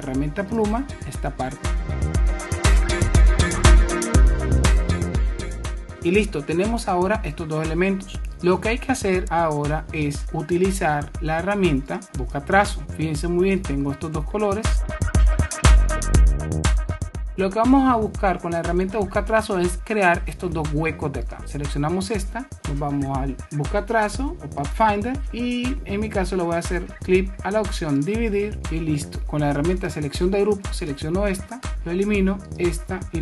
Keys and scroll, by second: 5.6 super+-, 15.3 super+-, 16.9 super+-.